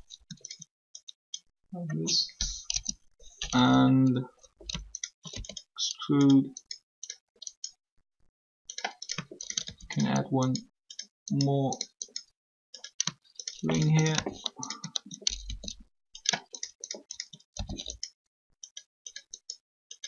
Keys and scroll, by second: 2.7 3.